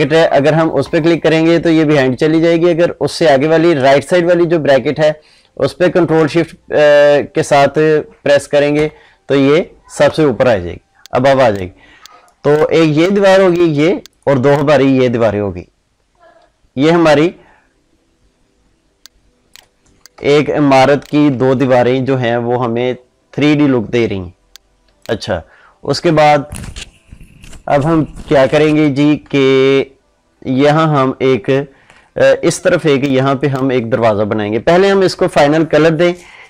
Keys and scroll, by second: 0.7 ctrl+shift+[, 8.6 ctrl+shift+], 20.2 ctrl+space.